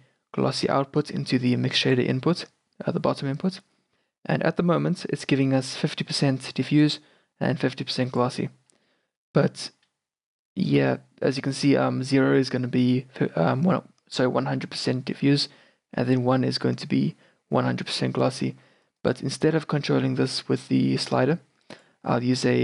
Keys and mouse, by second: 0.7-3.6 drag, 3.6-6.6 middle drag, 6.6-13.3 drag, 19.5-22.6 drag.